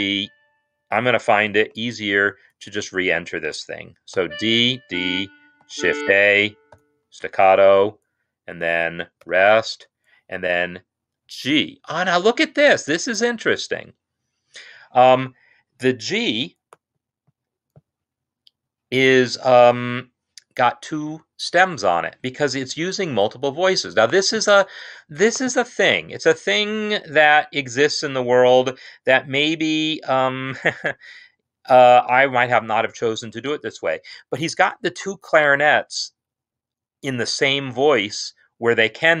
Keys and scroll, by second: 1.0 typing, 1.4 ctrl+z, 2.0 ctrl+z, 2.6 ctrl+Down, 4.0 d, 4.6 ctrl+Down, 5.4 shift+a, 6.6 shift+s, 9.1 0.